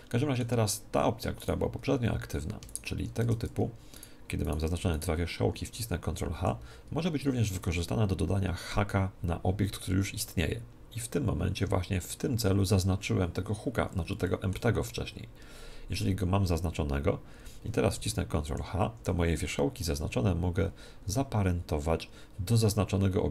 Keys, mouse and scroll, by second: 1.4-6.9 right drag, 3.3 Tab, 6.3 ctrl+h, 14.3-16.2 middle drag, 18.5 ctrl+h.